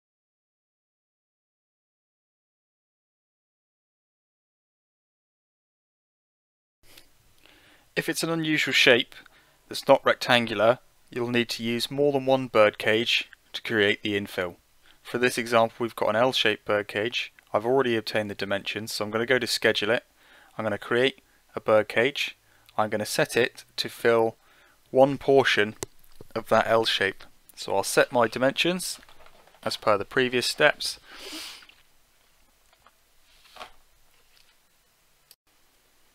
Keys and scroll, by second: 22.8 Delete, 23.9-24.8 typing, 27.5-28.8 typing, 28.8 Tab, 28.9 Return, 34.3 7, 34.9 Return.